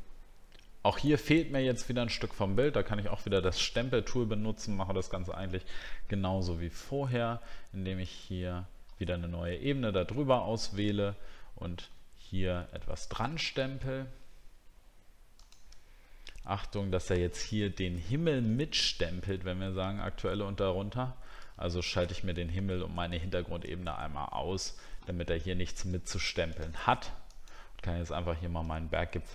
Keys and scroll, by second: 16.1 alt+scroll up 1, 18.6-19.7 alt+scroll down 1, 28.3 alt+scroll up 1.